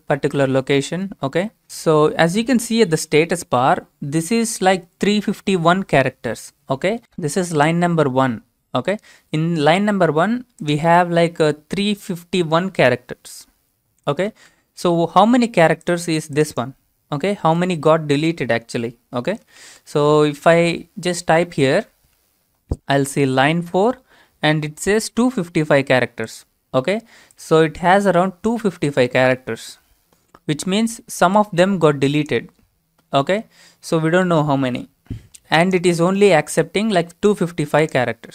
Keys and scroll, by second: 14.3 Return, 14.5 Return, 15.3 Return, 17.6 alt+Tab, 19.6 ctrl+v.